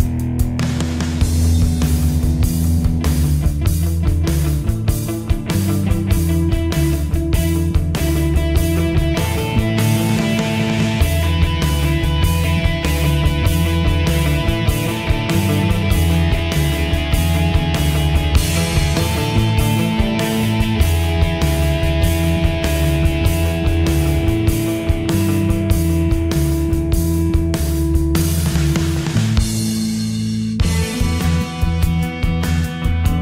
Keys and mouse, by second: 2.8 click, 22.7 click, 23.7-25.9 typing, 26.5 click.